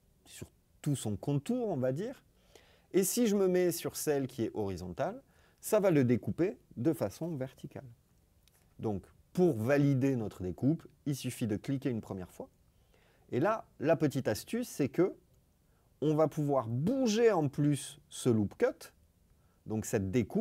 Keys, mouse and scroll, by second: 11.1 click.